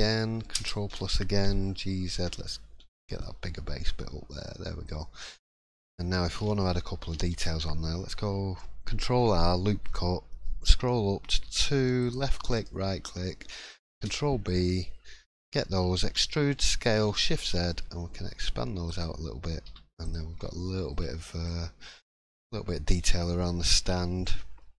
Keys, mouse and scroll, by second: 2.2 g, 13.2 middle click, 13.9 ctrl+b, 16.0 e, 19.6 3, 20.0 click, 20.3-20.8 scroll down 4, 20.6 middle click, 21.2 shift+middle click, 21.4-21.8 scroll up 2, 21.8 middle click, 23.0-23.3 scroll down 2, 23.4 shift+middle click, 24.2 scroll up 1, 24.6 middle click.